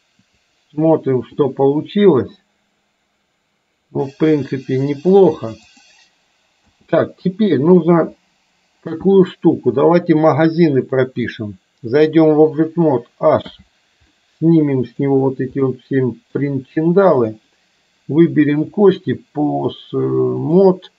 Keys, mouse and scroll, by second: 2.3 click, 6.8 space, 7.3 middle click, 9.9 click, 11.1 middle click, 12.0 click, 13.5 h, 14.3 middle click, 15.8 middle click, 17.4 click, 18.9-20.8 drag.